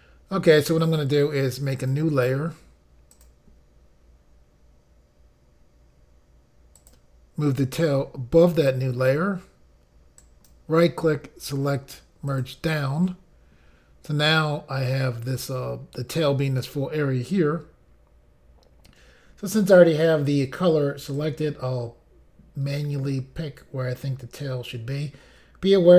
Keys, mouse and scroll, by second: 1.8 click, 3.2 click, 6.8 click, 7.5 click, 10.2 right click, 12.3 click, 21.2 click.